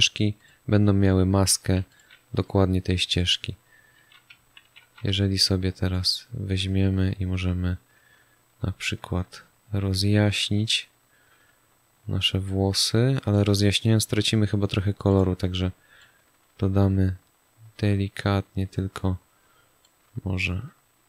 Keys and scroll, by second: 4.5 ctrl+d.